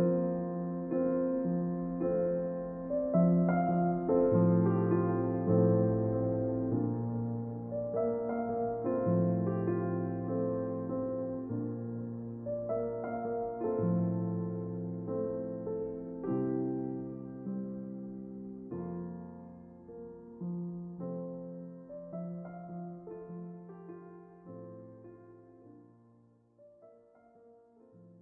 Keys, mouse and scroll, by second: 5.5 shift+z, 10.8-12.7 drag, 12.0 Tab, 21.6-23.7 middle drag, 24.9-26.6 drag.